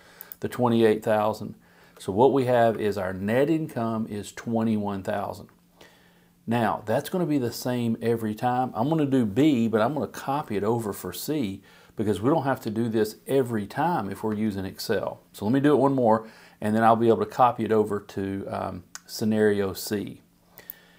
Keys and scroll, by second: 1.8 Return, 2.6 Up.